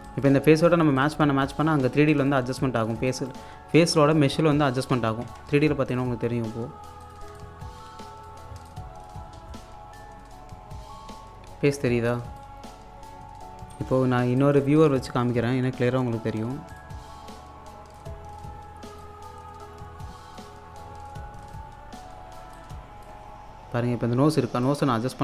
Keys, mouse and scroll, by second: 0.1 alt+click, 1.8 scroll down 1, 2.1 alt+click, 2.6-3.0 scroll up 1, 3.1 alt+click, 3.6-4.1 scroll down 1, 5.3 Tab, 5.9 click, 6.2-7.0 scroll down 1, 7.0 click, 8.5 scroll up 1, 8.7-12.8 alt+drag, 12.8-13.6 scroll down 1, 13.9 space, 14.4 alt+click, 14.9 Tab, 15.3-16.8 typing, 16.7-19.0 drag, 19.0-20.9 drag, 20.9-21.3 scroll up 1, 22.5 alt+click, 23.3-23.9 scroll up 1.